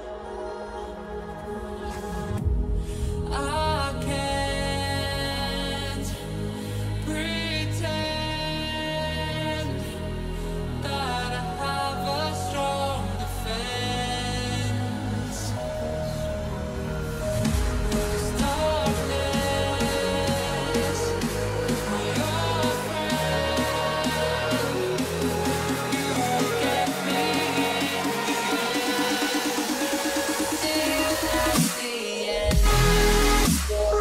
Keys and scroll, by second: 0.2 Return, 0.6 [, 9.5 Return, 9.7 ], 14.5 ctrl+z, 18.8 ctrl+z, 20.3 ctrl+z, 22.4 Return, 23.0 Return, 23.4 [, 25.1 h, 28.7 o, 29.6 ctrl+j, 30.0 ], 30.3 [, 30.9 ctrl+z, 31.4 o, 33.4 Return, 33.6 [.